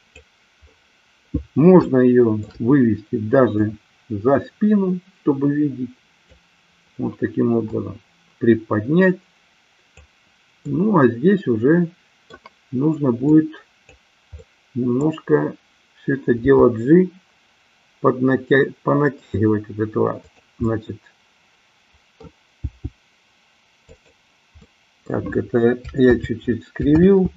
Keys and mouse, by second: 1.9 shift+middle click, 3.6-6.4 drag, 7.6-9.9 drag, 10.6-12.4 middle drag, 13.1-14.0 drag, 14.4-15.1 middle drag, 16.5 g, 20.6-22.2 middle drag, 22.6 g, 23.9 click, 24.5-25.1 middle drag, 26.1 ctrl+z, 26.9 ctrl+z.